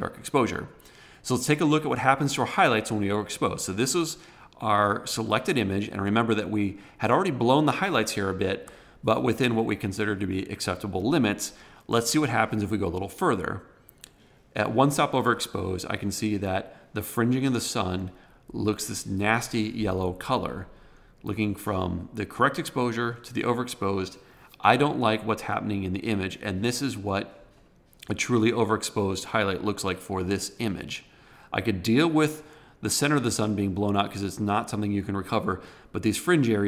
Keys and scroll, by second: 8.4 super+=.